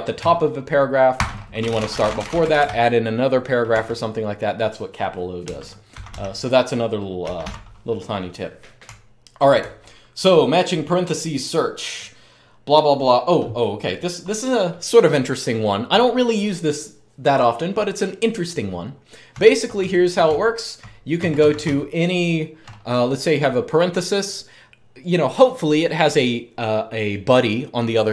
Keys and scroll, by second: 0.7-3.1 typing, 3.5 Return, 5.3 BackSpace, 5.7 Escape, 6.7-9.4 typing, 19.0-22.3 typing.